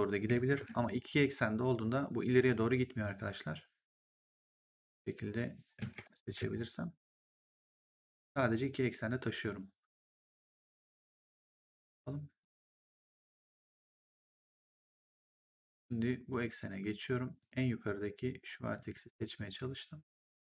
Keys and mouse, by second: 0.5 ctrl+z, 1.7 click, 6.1 ctrl+z, 7.5 click, 10.1 click, 10.8 middle click, 12.3 click, 16.2 click, 17.3 click, 18.7 click, 19.9 click.